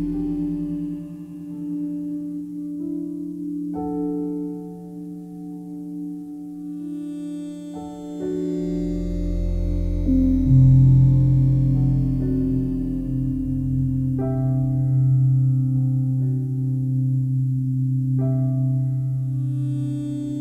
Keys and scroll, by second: 14.5 f.